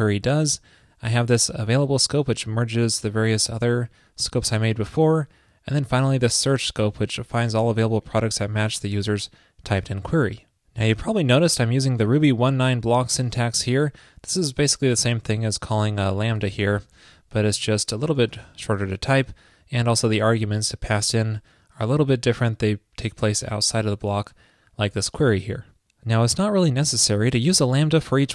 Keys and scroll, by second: 17.7 alt+BackSpace.